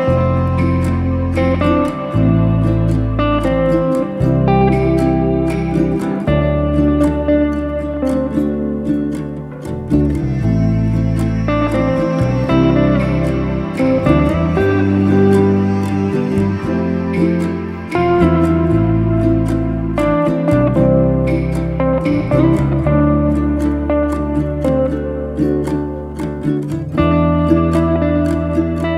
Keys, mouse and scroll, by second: 0.4 e, 4.3 middle click, 4.5 e, 16.3-20.3 middle drag, 23.4-24.9 middle drag, 25.7-27.2 middle drag, 28.4 click.